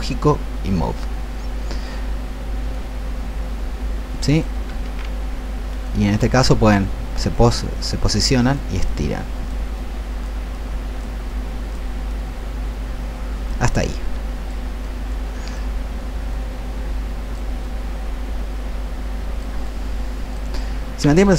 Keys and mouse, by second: 2.6-4.5 alt+drag, 4.8 ctrl+z, 5.9-19.4 drag.